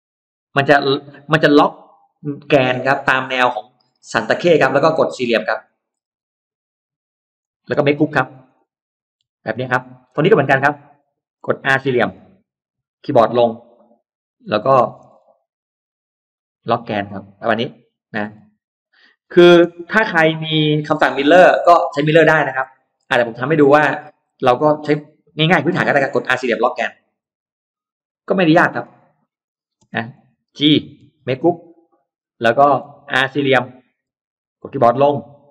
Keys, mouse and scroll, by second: 0.1 Down, 3.3 middle click, 3.7-4.3 scroll down 4, 4.3 middle click, 5.5 click, 5.7 middle click, 7.2 click, 7.6 space, 7.8 click, 8.0 click, 8.4 click, 9.0 g, 9.5 middle click, 9.5 scroll up 1, 9.9-10.2 scroll down 1, 10.2-10.9 scroll up 2, 10.9 middle click, 11.2 scroll down 1, 11.5 scroll up 1, 11.6 middle click, 11.7 scroll down 1, 11.9 scroll up 1, 12.2 r, 13.6 Down, 14.3 click, 14.5-15.3 scroll down 2, 16.2 middle click, 16.5-16.9 scroll down 1, 18.1-18.4 scroll down 1, 18.6 scroll up 1, 19.1 click, 19.5 space, 19.7 click, 19.9 click, 20.7 g, 20.8-21.8 scroll down 2, 21.1 middle click, 21.8 middle click, 22.2-23.1 scroll down 2, 22.5 middle click, 23.1-23.5 scroll up 1, 23.7 middle click, 24.5 middle click, 27.1-28.1 scroll down 2, 28.1 click, 28.3 middle click, 29.3 click, 29.6 space, 29.8 click, 30.4 click, 30.9 g, 30.9-31.3 scroll down 1, 31.1 g, 31.5 click, 31.7-32.4 scroll up 1, 32.4 middle click, 32.8-33.3 scroll up 1, 33.3 middle click, 33.7 middle click, 33.9 r, 34.3 r, 35.2 Down.